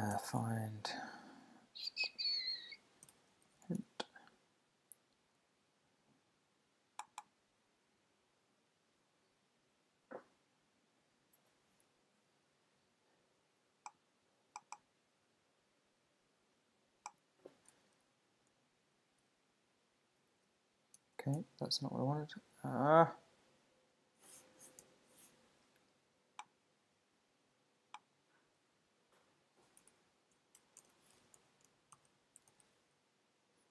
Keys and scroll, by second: 0.1 super+f, 19.2 shift+super+o, 21.4 Escape, 30.1 shift+super+Left.